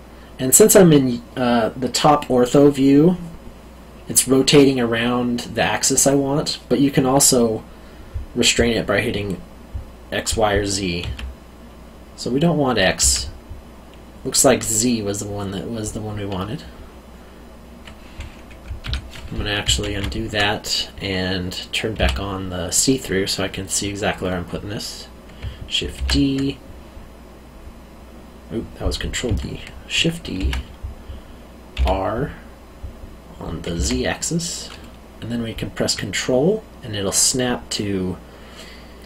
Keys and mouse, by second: 11.0 x, 13.0 z, 18.8 Escape, 19.8 ctrl+z, 21.9 q, 25.9 ctrl+d, 30.3 shift+d, 31.7 r, 33.7 z.